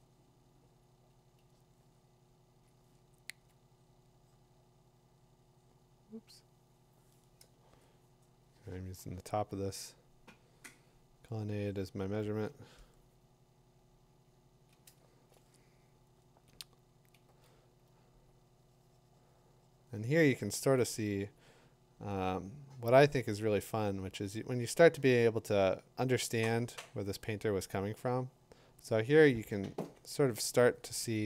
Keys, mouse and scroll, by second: 2.7 click, 3.4 click, 3.5 click, 4.8 click, 6.5 typing, 6.6 click, 7.7-9.0 click, 8.2 click, 9.0 click, 9.2 click, 9.3 click, 9.5 click, 9.6 click, 9.6 click, 9.9 click, 10.0-10.3 click, 10.4-10.8 click, 10.9 click, 11.1 click, 11.2 click, 11.3 click, 11.4 click, 11.6 click, 11.8 click, 11.9-12.2 click, 12.1 click, 12.1 click, 12.4 click, 12.4 click, 12.9-13.7 click, 13.5 click, 13.6 click, 13.6 click, 13.8 click, 14.0-14.6 click, 14.2 click, 14.3 click, 14.6 click, 17.2 click, 21.4 click, 22.1 click, 27.8 click, 30.0 click.